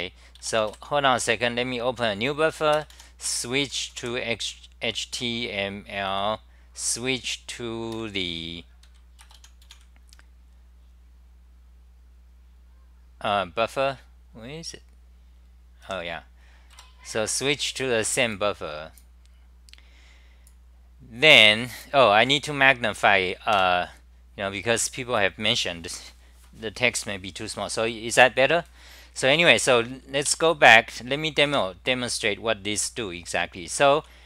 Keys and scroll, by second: 18.3 Return, 23.6 super+=, 30.3 ctrl+shift+Tab, 31.5 ctrl+Tab, 32.8 ctrl+Tab, 34.0 c.